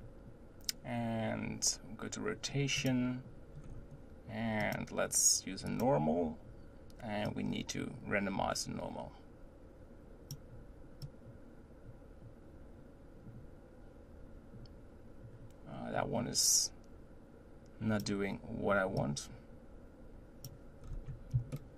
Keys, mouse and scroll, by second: 3.2 click, 3.6 scroll up 3, 4.6-14.7 drag, 18.9-20.8 drag, 20.8 scroll down 3, 21.5-21.7 shift+middle drag.